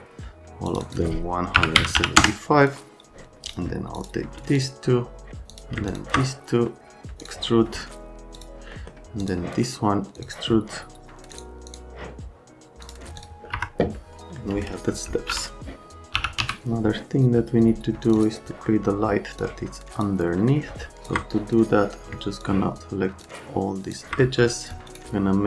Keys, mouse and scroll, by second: 0.7 click, 0.8 click, 1.6 KP_1, 1.7 KP_7, 2.0 KP_5, 2.2 KP_Enter, 3.9 click, 4.5 ctrl+click, 5.5 click, 5.9 ctrl+click, 7.2 click, 8.4 click, 8.7 scroll down 2, 9.2 click, 10.2 click, 11.3 click, 11.7 click, 12.8 click, 13.2 click, 13.5 F3, 15.1 alt+x, 15.9-16.9 typing, 18.1 click, 18.5 middle click, 19.4 click, 20.4 middle click, 21.0 ctrl+click, 21.3 scroll up 1, 22.4 ctrl+click, 23.2 ctrl+click, 24.7 scroll down 2.